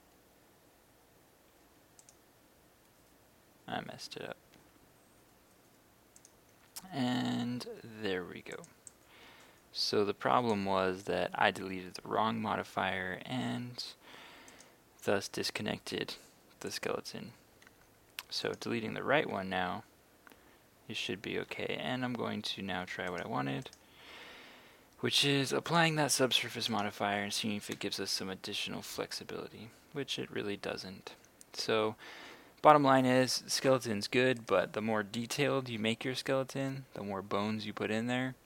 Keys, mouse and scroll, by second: 3.9 Escape, 5.2-10.9 drag, 18.5 right click, 19.3 r, 20.9 Escape, 23.1 right click, 25.7 click, 26.7 right click, 27.8 r, 32.4 Escape, 34.4 right click, 35.5 r.